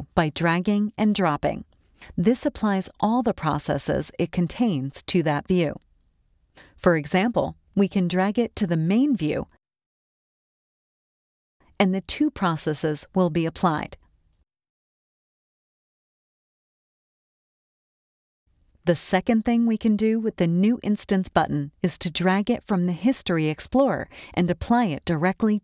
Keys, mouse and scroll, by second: 4.5-8.7 drag, 12.4-13.8 drag, 14.4 click, 16.7 click, 21.8 click, 23.1 click.